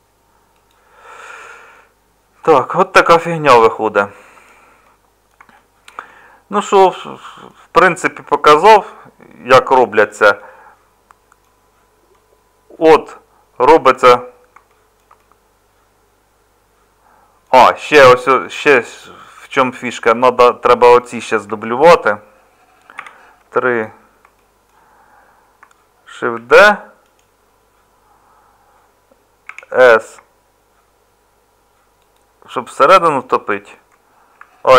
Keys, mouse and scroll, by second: 21.5 Tab, 22.9 3, 26.3 shift+d, 29.5 s.